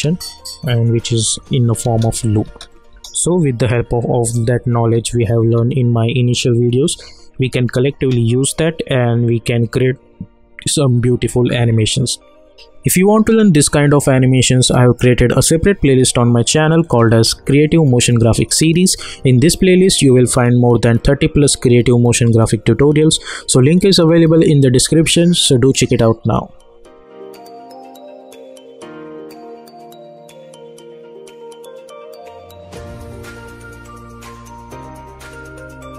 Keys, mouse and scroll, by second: 0.7 click, 1.3 u, 1.8 space, 4.8 space, 7.5 space, 12.8 space.